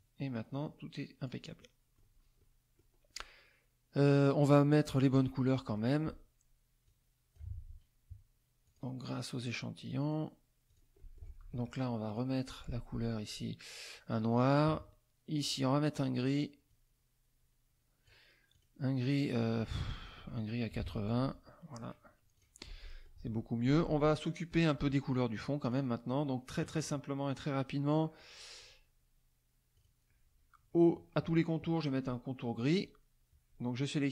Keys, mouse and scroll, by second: 0.0-1.4 drag, 1.6 middle click, 2.4 middle click, 6.9 click, 8.7 click, 9.9 click, 10.7 click, 11.0 middle click, 11.4 F2, 12.1 click, 13.3 click, 13.9 click, 15.4 click, 16.7-18.2 drag, 18.5 click, 19.9 click, 20.7 KP_5, 20.8 KP_0, 21.2 Tab, 22.4 click, 22.8 middle click, 24.2 middle click, 25.6 click, 28.6 shift+click, 29.7 shift+click, 32.7 shift+click.